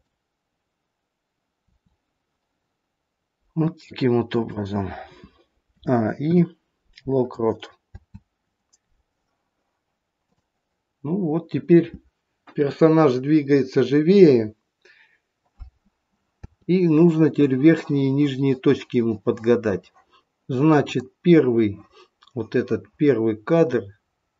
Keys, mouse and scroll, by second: 1.5 r, 5.7 a, 6.3 i, 7.8 space, 10.2 click, 10.9-13.2 scroll down 4, 16.4 space, 20.9 click.